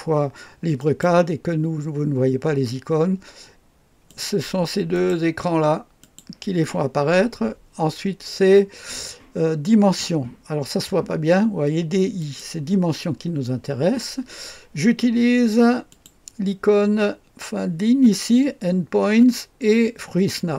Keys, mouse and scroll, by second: 0.8 click, 4.1 click, 5.0 click, 6.0 click, 12.2 click, 15.9 click.